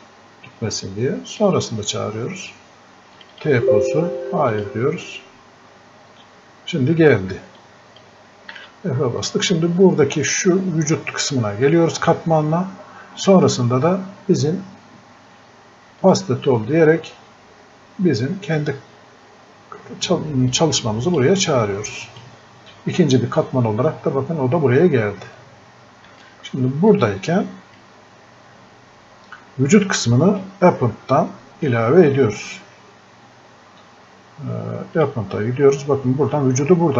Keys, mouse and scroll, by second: 1.4 click, 7.6 click, 8.6 f, 9.3 click, 16.0 click, 20.5-35.0 drag.